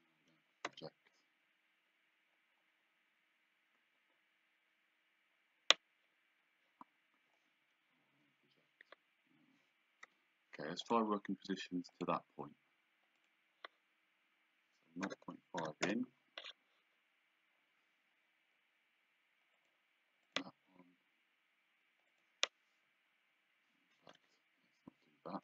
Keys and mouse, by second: 0.2 Escape, 0.7 p, 7.6 Escape, 10.1 d, 10.9 click, 12.0 click, 13.2 click, 15.1 KP_0, 15.9 Return, 19.6 click, 22.2 click, 24.2 Escape.